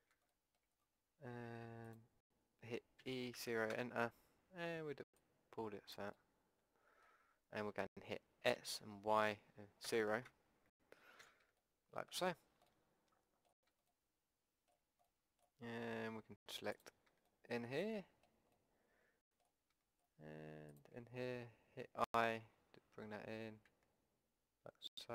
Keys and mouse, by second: 1.9 click, 3.0 e, 6.1 click, 7.0-8.5 middle drag, 8.5 s, 11.2 a, 11.6 middle click, 12.1 middle click, 12.9-13.9 middle drag, 16.7 middle click, 17.2-18.5 middle drag, 18.8 middle click, 19.0 middle click, 22.0 i.